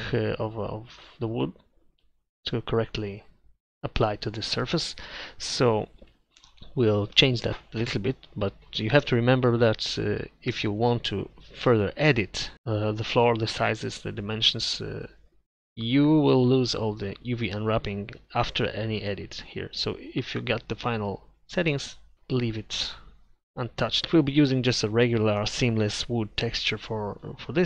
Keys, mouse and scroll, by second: 3.9-8.6 middle drag, 10.0 Tab, 12.5-14.6 drag, 22.1 Tab, 22.8 Tab.